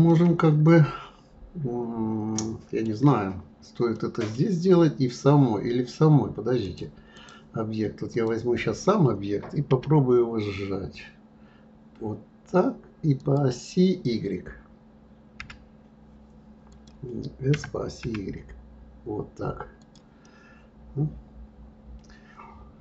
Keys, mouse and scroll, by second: 0.0-3.1 middle drag, 3.9-6.6 middle drag, 6.6-8.2 drag, 9.7 s, 16.7 click, 17.5 s, 20.2-22.8 middle drag.